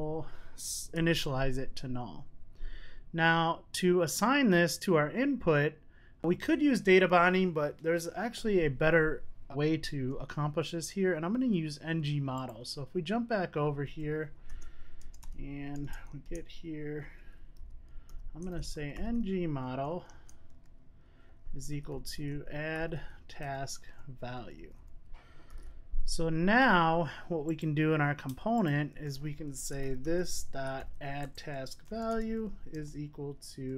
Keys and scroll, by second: 1.1 super+s, 4.6 super+s, 14.4 Tab, 23.4 Return, 25.9 super+s, 31.2 Return.